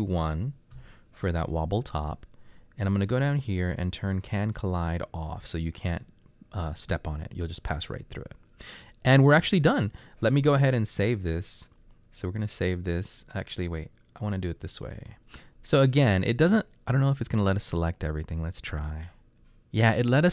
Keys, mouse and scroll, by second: 0.8 Return, 4.6 typing, 17.8-18.5 drag.